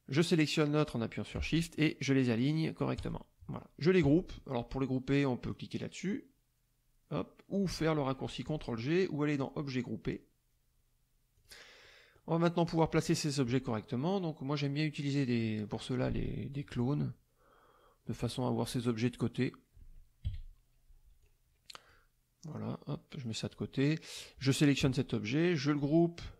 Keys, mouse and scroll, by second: 3.0 click, 3.5 middle click, 8.4 click, 9.3 click, 11.4 click, 11.8 middle click, 13.0 click, 18.0 middle click, 20.2 KP_Subtract, 21.2-22.0 drag, 22.5 click, 24.1 click, 25.6 click.